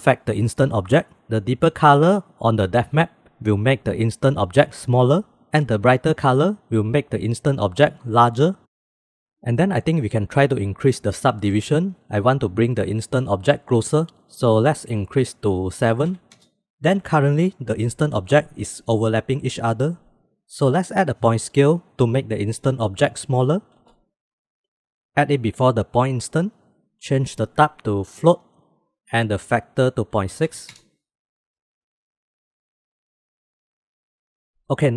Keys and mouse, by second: 8.6 middle click, 10.6-11.0 middle drag, 11.8-15.6 drag, 16.7 middle click, 20.9 middle click, 21.7 shift+a, 26.3-26.6 middle drag, 27.6-28.7 drag, 29.4-31.3 drag, 31.5-31.9 shift+middle drag, 32.1-33.0 middle drag, 33.2 middle click, 33.4 drag, 33.7 middle click, 33.8-34.3 drag, 34.3 middle click, 34.7 middle click.